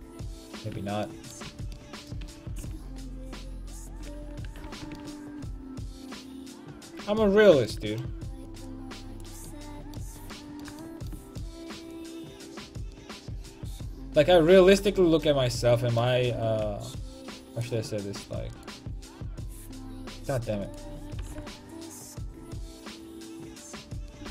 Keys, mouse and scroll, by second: 0.8 Tab, 1.5 a, 2.3 a, 2.6 c, 4.7 ctrl+l, 9.7-11.7 middle drag, 12.4-14.3 drag, 16.3 r, 16.9 click, 17.7 right click, 19.6 click, 21.2 r, 23.8 click, 24.2 r.